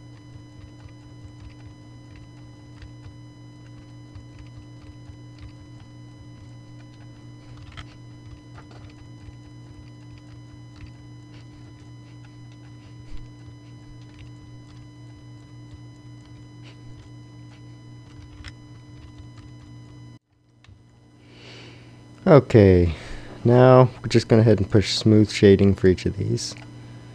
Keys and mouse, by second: 0.0-2.8 typing, 3.7 ctrl+r, 4.1-6.3 typing, 5.8 Tab, 7.1 Tab, 7.3 Tab, 7.5-11.7 typing, 8.1 Tab, 11.3 Tab, 12.6 Tab, 12.8-16.9 typing, 16.2 Tab, 17.5 Tab, 18.0 Tab, 18.1-20.6 typing, 19.3 click, 19.8 click, 20.2 Tab, 20.5 Tab, 21.9-23.4 middle drag.